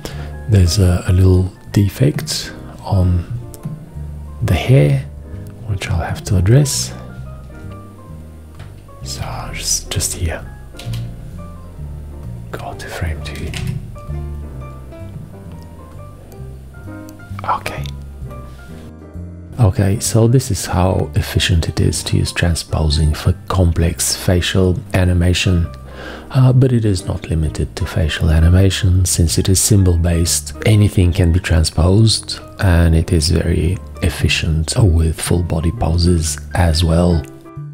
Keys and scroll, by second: 9.3 v, 10.9 x, 13.5 2, 13.7 Return.